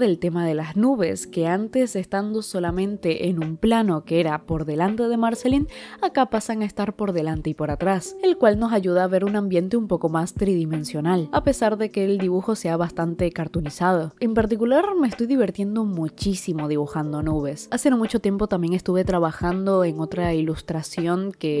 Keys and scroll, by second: 1.4-3.3 typing, 2.9 ctrl+z, 3.2 ctrl+z, 3.5 ctrl+z, 3.9 ctrl+z, 4.1 ctrl+z, 4.3 ctrl+z, 4.6 ctrl+z, 4.7 ctrl+z, 5.3-15.6 typing, 5.4 ctrl+z, 9.7 ctrl+z, 12.2 ctrl+z, 12.6 ctrl+z, 12.9 ctrl+z, 13.2 ctrl+z, 13.4 ctrl+z, 14.0 ctrl+z, 14.7 ctrl+z, 15.1 ctrl+z, 15.3 ctrl+z, 15.4 ctrl+z, 16.3 ctrl+z, 16.4 ctrl+z, 16.9-20.0 typing, 17.1 ctrl+z, 17.5 ctrl+z, 18.3 ctrl+z, 18.7 ctrl+z, 18.9 ctrl+z, 19.2 ctrl+z, 19.4 ctrl+z, 20.9 ctrl+z, 21.1 i, 21.3 i, 21.4 i, 21.5 i.